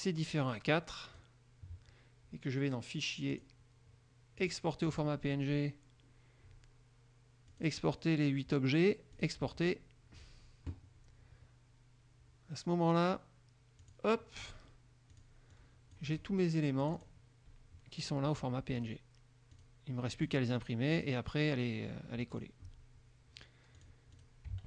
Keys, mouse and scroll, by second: 3.5 click, 4.5 click, 7.7 click, 9.3 click, 14.0 click, 14.6 click, 15.3 click, 15.7-16.5 drag, 16.9 click, 18.9 click, 19.7 click, 20.4 click, 21.1 click, 22.5 click, 23.9 click, 24.3 click.